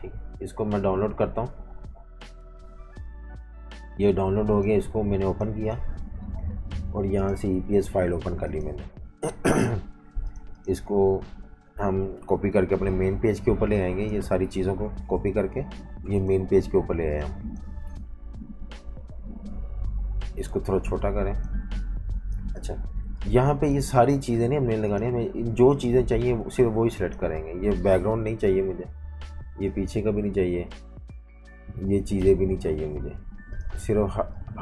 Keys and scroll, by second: 12.8 super+-, 14.8 super+c, 16.9 v, 17.1 space, 17.8 super+v, 22.8-24.4 typing, 27.5 super+z, 28.2 Delete, 30.2 Delete.